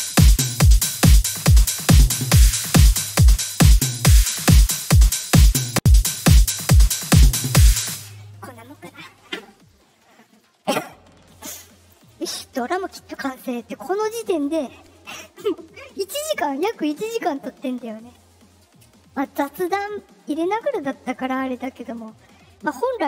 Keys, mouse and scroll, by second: 0.9 click, 3.0 click, 3.7 space, 3.9 space, 6.6 click, 7.7 space, 11.9 click.